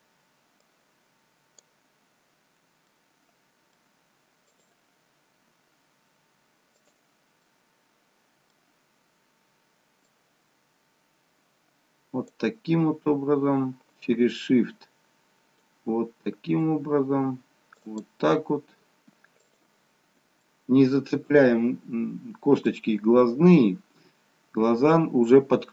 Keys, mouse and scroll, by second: 3.1 middle click, 4.6 shift+click, 6.9 click, 7.6 middle click, 10.3 click, 14.0 shift+click, 20.7 middle click, 23.4 middle click.